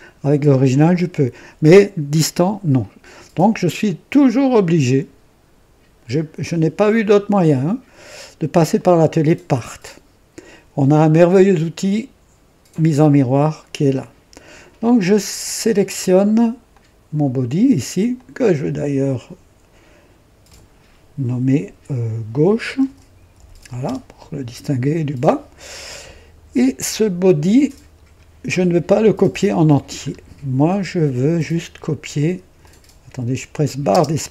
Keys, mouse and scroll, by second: 4.4 click, 8.6 click, 16.6 click, 18.0 click, 20.4 F2, 22.0-24.0 typing, 29.4-29.7 scroll down 1, 30.0 scroll up 1, 32.5 click, 33.8 space, 34.0 space.